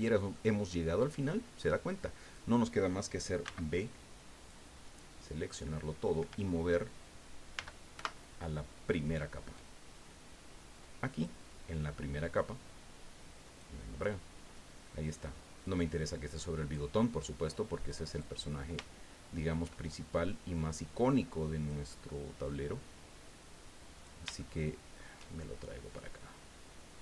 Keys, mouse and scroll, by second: 0.3 click, 1.4 scroll up 2, 1.7 scroll down 2, 3.4 b, 4.5-5.7 drag, 7.5 m, 7.9 1, 11.1 click, 13.4 click, 14.1-14.7 scroll down 2, 15.6-16.9 drag, 17.0 scroll down 2, 17.9 click, 18.8 shift+middle click, 20.3-21.8 drag, 23.3 click, 24.4 shift+middle click, 25.9-27.0 drag.